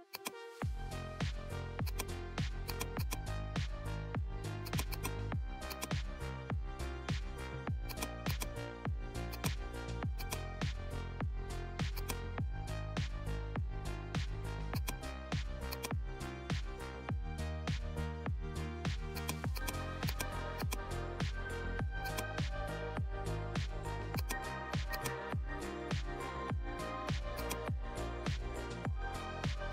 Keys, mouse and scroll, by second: 0.0-1.8 drag, 1.8-9.3 drag, 11.1 right click, 11.9 click, 14.6-24.1 drag, 26.9 click, 27.3-29.7 drag.